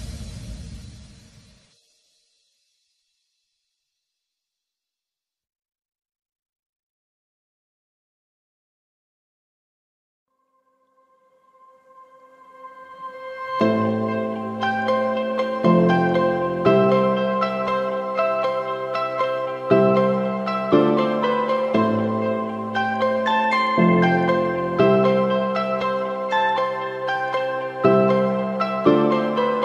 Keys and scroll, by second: 1.9 b, 7.1 [, 7.7 [.